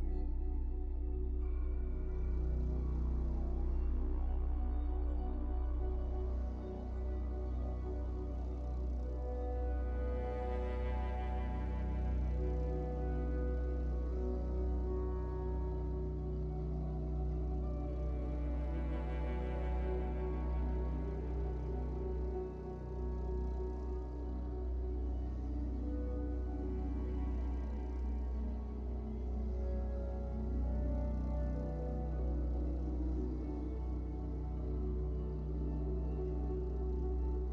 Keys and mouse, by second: 0.0-22.6 typing, 0.4 alt+a, 0.9-2.5 drag, 1.5 alt+a, 2.6 middle click, 2.8 click, 3.1 ctrl+z, 3.7 click, 4.2 middle click, 4.8 click, 6.1 click, 6.7 alt+a, 7.0 click, 7.2 alt+a, 8.0 middle click, 8.2 middle click, 8.2 ctrl+z, 11.5 alt+a, 12.0 click, 13.9 ctrl+z, 14.2 ctrl+z, 14.9 alt+a, 15.4 ctrl+z, 15.7 click, 15.9 alt+a, 16.6 click, 17.1 middle click, 17.4 alt+a, 17.6 click, 18.1 middle click, 18.5 Tab, 18.6 click, 19.1 middle click, 19.4 Tab, 19.6 click, 19.6 Tab, 19.9 Tab, 20.0 Tab, 20.3 Tab, 20.4 Tab, 20.5 Tab, 20.8 Tab, 21.1 click, 21.3 Tab, 21.5 Tab, 22.0 Tab, 22.4 middle click, 22.8 alt+a, 22.8 click, 23.2 alt+a, 23.5 click, 23.8 alt+a, 24.2-26.8 typing, 24.4 alt+a, 24.5 middle click, 24.5 click, 24.7 middle click, 25.5 middle click, 26.5 middle click, 27.7 middle click, 27.8-33.7 typing, 30.4 Tab, 30.7 click, 32.2 Tab, 32.2-33.9 middle drag, 33.2 alt+a, 34.0-35.5 drag, 35.5-37.5 typing, 35.8 click.